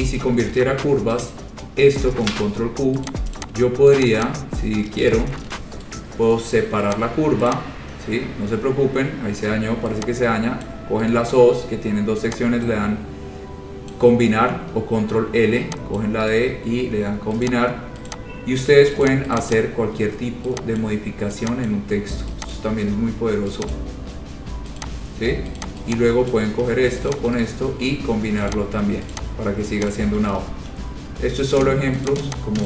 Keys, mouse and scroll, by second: 0.2 ctrl+a, 1.1 ctrl+1, 2.2 ctrl+q, 3.2 click, 3.5 click, 4.1 click, 4.4 click, 4.6-5.0 scroll, 5.5 ctrl+q, 6.0 right click, 7.2 click, 7.7 click, 7.9-9.3 scroll, 10.8 click, 11.3 right click, 14.1 click, 16.2 click, 16.5 right click, 17.6 click, 18.2 click, 18.7-19.1 scroll, 19.2 click, 19.5 click, 19.7 click, 20.1-20.4 scroll, 21.0 click, 21.8 scroll down 4, 21.9 click, 22.7 click, 23.9 click, 24.8-25.4 scroll, 25.8 click, 26.5 click, 27.2 shift+click, 27.4 shift+click, 27.6 click, 27.7 right click, 28.7 click, 29.3 click, 30.1 click, 30.1 shift+click, 30.6 ctrl+z, 30.6 ctrl+<, 30.9-31.9 scroll, 32.2 click.